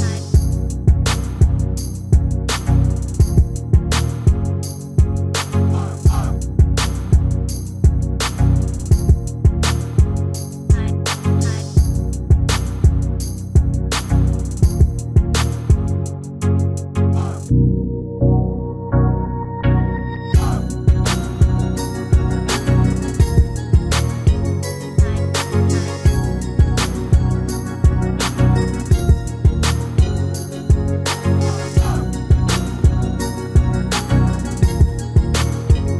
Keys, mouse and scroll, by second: 0.9 ctrl+l, 1.5-6.4 middle drag, 6.6 shift+d, 13.5-16.7 right drag, 17.0 ctrl+l, 19.3 shift+d, 25.4-33.5 middle drag, 33.6-35.9 right drag.